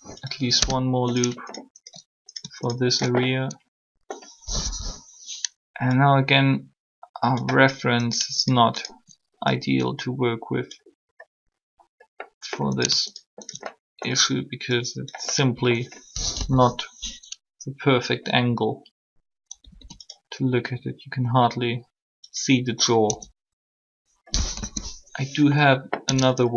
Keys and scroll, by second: 0.5 Return, 4.6 1, 16.3 1, 19.6 typing, 23.1 Tab, 24.5 3, 26.0 Tab.